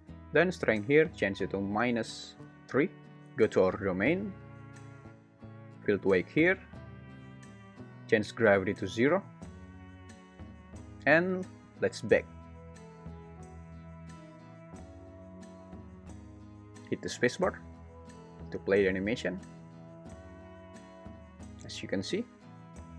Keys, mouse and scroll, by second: 0.6-3.0 drag, 6.0 click, 8.4 click, 15.8 click, 17.9 space.